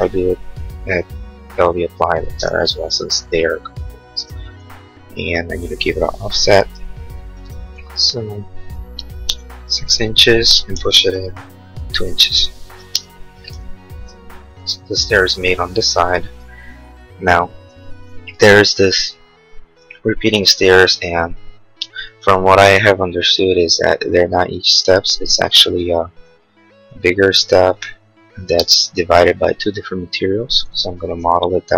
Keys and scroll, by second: 2.2 space, 2.5 Escape, 7.8 f, 9.0 6, 9.4 Return, 10.9 p, 12.5 Return, 12.8 space, 13.1 Escape, 26.3 r, 28.6 space, 31.0 e.